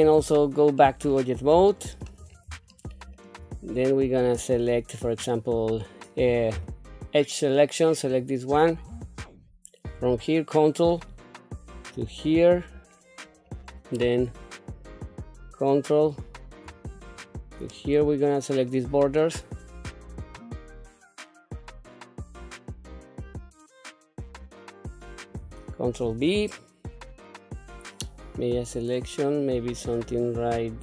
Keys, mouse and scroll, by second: 0.0 Tab, 0.8 middle click, 1.7 shift+middle click, 2.3 scroll up 1, 2.7 shift+middle click, 3.5 scroll down 2, 5.2 click, 6.5 2, 7.9 click, 10.9 ctrl+click, 12.2-13.2 middle drag, 13.4-14.0 scroll up 1, 14.9 ctrl+click, 16.9 ctrl+click, 17.7-18.7 middle drag, 20.4 shift+click, 20.6 ctrl+click, 20.8 middle click, 21.1 middle click, 21.3 shift+click, 21.5 shift+click, 21.6 middle click, 22.0 shift+click, 22.3 ctrl+click, 22.4 middle click, 22.5 scroll down 2, 22.9 ctrl+b, 23.6 middle click, 23.8 ctrl+z, 23.9 scroll up 2, 24.0 shift+middle click, 24.8 ctrl+click, 24.9 middle click, 25.1 scroll down 1, 26.0 ctrl+b.